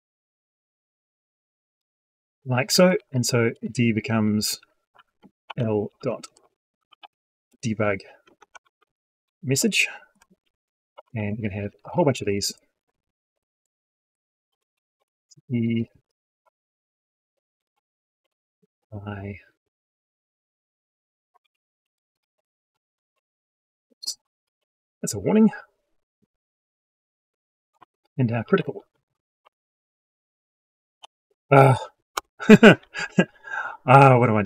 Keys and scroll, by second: 2.8 ctrl+shift+Down, 11.4 ctrl+c, 12.7 ctrl+v, 16.5 ctrl+v, 21.3 ctrl+v, 27.7 ctrl+v.